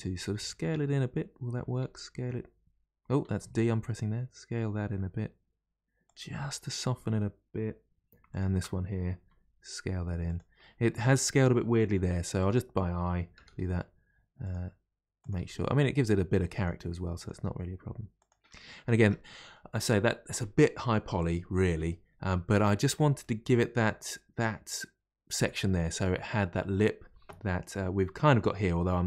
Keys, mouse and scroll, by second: 0.1 d, 1.7 d, 3.2 s, 6.4-8.3 middle drag, 8.3 alt+click, 9.1 s, 10.5-11.9 middle drag, 11.9 1, 12.3 click, 13.3 g, 15.1 click, 15.3 g, 17.1 click, 17.3 g, 18.5 middle click, 18.9 Tab, 19.1-19.5 scroll down 1, 19.5-26.1 middle drag.